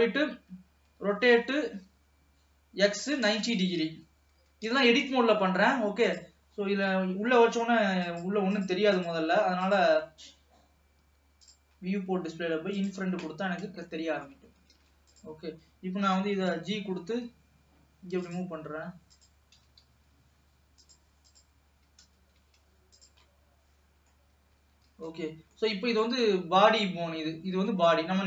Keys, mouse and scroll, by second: 1.1 r, 4.0-4.4 scroll down 2, 4.4 g, 8.1 click, 8.7 click, 9.0 click, 9.8 click, 11.4 click, 11.8-12.8 scroll down 4, 12.8 click, 13.4 scroll up 1, 14.0 shift+middle click, 14.9 ctrl+s, 15.2 click, 16.1 g, 19.2 click, 19.6 g, 21.3 click, 22.1 g, 23.3-24.6 middle drag, 24.6-25.3 scroll up 1, 25.3 ctrl+s, 25.5 scroll down 3, 25.7-28.2 middle drag.